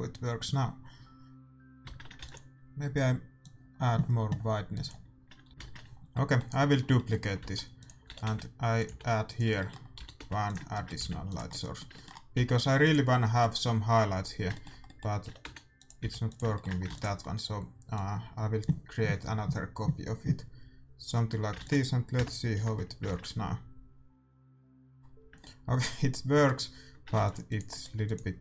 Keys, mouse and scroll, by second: 0.9 shift+z, 1.8-2.8 drag, 2.0 shift+z, 2.1 ctrl+s, 3.4-5.2 drag, 5.4 r, 5.7 shift+z, 5.9-8.4 middle drag, 7.4 shift+d, 8.0 r, 8.9 g, 9.5-10.8 middle drag, 9.9 r, 11.0 g, 12.3 g, 15.2 r, 16.0 g, 16.8 ctrl+s, 17.9 click, 17.9 right click, 21.5 ctrl+s, 22.1 KP_0, 22.6-24.1 middle drag, 25.0-27.8 middle drag, 27.5 ctrl+s, 28.1-28.4 drag.